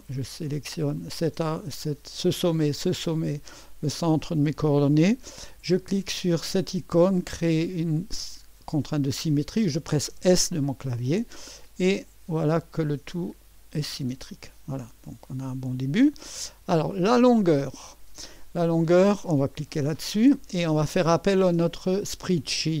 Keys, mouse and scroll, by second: 1.0 click, 2.6 click, 4.0 click, 10.1 s, 13.7-16.0 drag, 17.0 click, 19.7-22.8 drag.